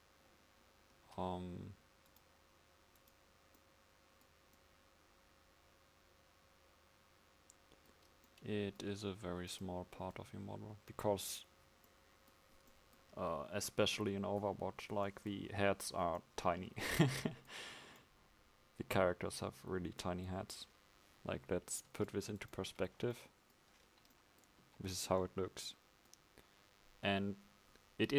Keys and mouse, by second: 9.0 Tab, 11.2 Tab, 24.7 KP_5.